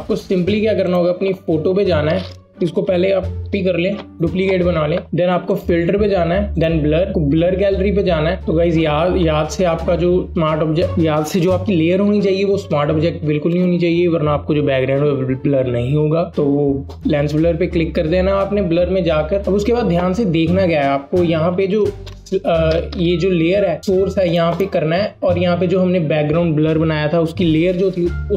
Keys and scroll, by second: 3.4 ctrl+j.